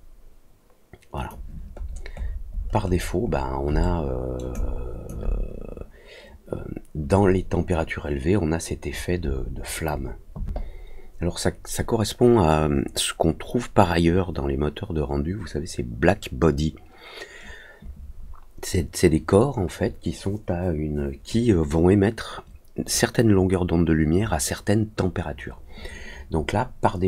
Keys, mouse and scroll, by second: 1.1 click, 1.7-3.4 scroll down 6, 1.8 middle click, 2.1 middle click, 2.5 middle click, 2.8 middle click, 3.2 middle click, 3.8 alt+middle click, 4.5 alt+click.